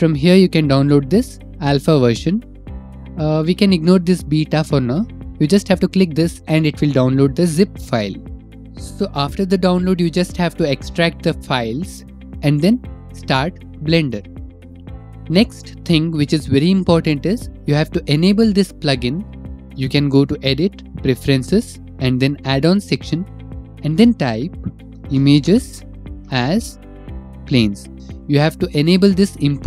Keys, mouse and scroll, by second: 5.4 click, 8.0 right click, 13.3 click, 14.4 click, 19.5 click, 20.2 click, 21.2 click, 23.3 click.